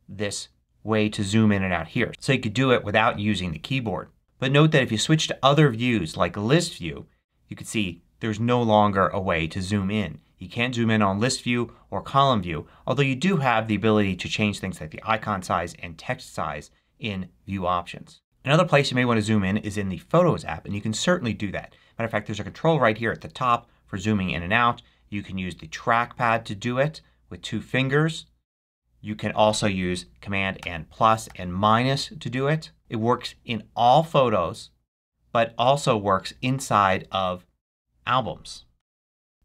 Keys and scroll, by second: 30.5 super+=, 31.2 super+-, 38.7 super+=, 39.3 super+-.